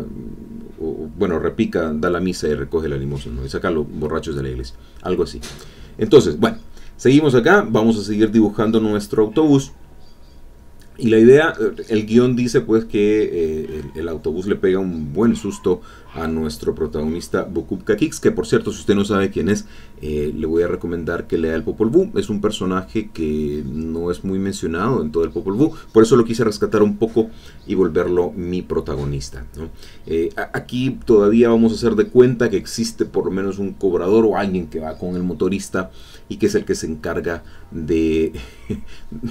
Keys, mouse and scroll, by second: 1.6 click, 2.3-4.7 drag, 4.9 click, 6.0 click, 6.3 click, 7.0 click, 9.7 click, 10.3-11.7 drag, 12.0 click, 12.6-14.5 drag, 14.7-15.9 drag, 16.1-19.7 drag, 21.9 click, 22.3 click, 22.6 click, 23.0-24.1 drag, 29.2 click, 29.8-32.6 drag, 33.1 click, 33.5-36.0 drag.